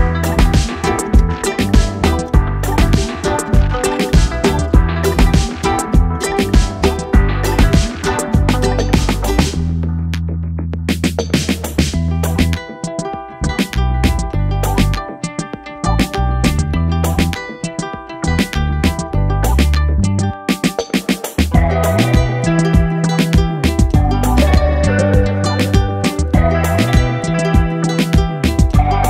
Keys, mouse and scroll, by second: 0.7 click, 1.8 KP_1, 2.5 e, 6.7 click, 7.9 click, 9.7 ctrl+b, 13.3 Tab, 13.8 right click, 15.1-15.8 scroll up 6, 15.8 KP_1, 17.1 click, 19.9 shift+a, 21.0 shift+a, 21.2 shift+a, 23.7 ctrl+alt+KP_0, 25.5 click, 26.3 click.